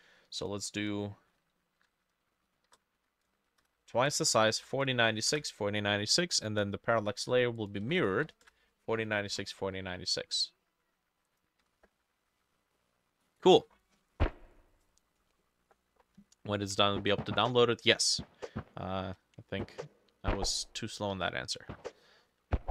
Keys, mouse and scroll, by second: 0.8 double click, 2.3-7.4 shift+drag, 2.3 shift+middle click, 2.6 shift+8, 3.0 2, 3.7 Return, 4.5 ctrl+middle click, 4.6-5.0 typing, 5.0 middle click, 5.0 ctrl+v, 5.4 Return, 7.9 ctrl+v, 8.2 ctrl+v, 8.2 click, 8.5 Return, 9.1 middle click, 9.3 ctrl+s, 10.0 middle click, 11.7 F6.